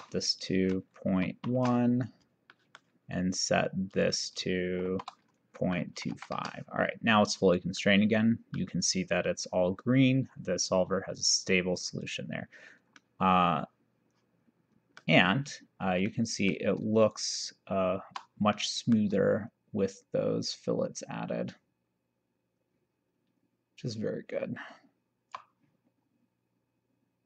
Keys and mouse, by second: 1.2 ., 1.4 1, 2.6 middle click, 4.0 click, 4.9 shift+r, 5.6 KP_Decimal, 5.9 KP_2, 6.2 KP_5, 7.9 middle click, 11.2 click, 13.0 middle click, 16.2 middle click, 17.2 shift+right click, 18.6 middle click, 19.6 shift+right click.